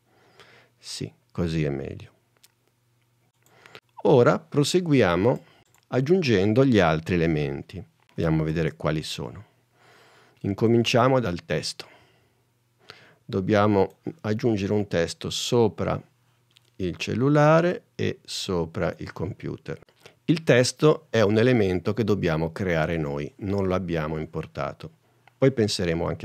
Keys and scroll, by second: 8.6 super+Tab.